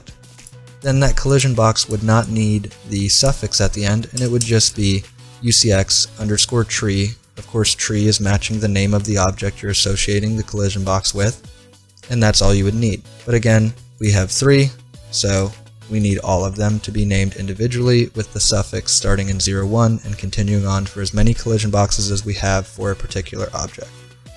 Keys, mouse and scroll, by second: 0.4-2.2 right drag, 1.4-2.9 drag, 4.4 BackSpace.